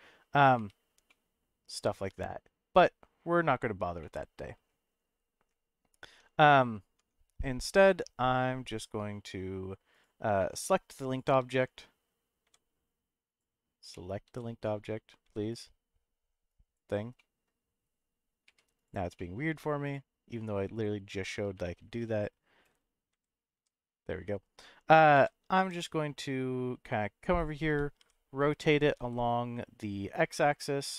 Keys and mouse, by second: 0.6 1, 1.1 middle click, 4.0 middle click, 6.0 Tab, 7.0 Tab, 10.4 middle click, 12.4 l, 13.9 middle click, 14.2 l, 14.7 middle click, 15.2 l, 15.5 click, 16.5 click, 17.1 middle click, 18.4 1, 18.8 click, 19.1 middle click, 19.8 click, 21.5 4, 21.8 3, 23.1 l, 23.5 l, 25.1 g, 25.5 y, 27.4 click, 27.7 r, 28.0 y, 28.9 x.